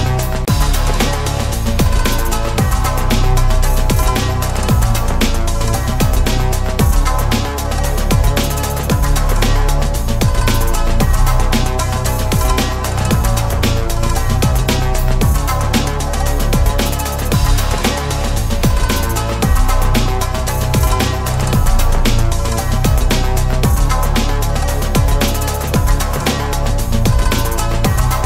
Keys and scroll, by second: 10.5 ctrl+z.